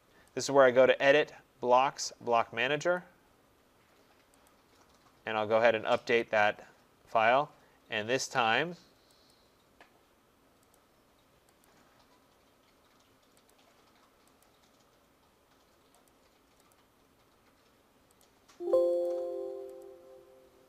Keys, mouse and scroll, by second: 0.4 click, 3.0 click, 4.5 click, 6.2 click, 8.4 click, 9.3 click, 10.8 click, 11.7 click, 13.5 click, 14.5 click, 16.1 click, 16.7 click, 18.2 click, 19.1 click, 19.8 click.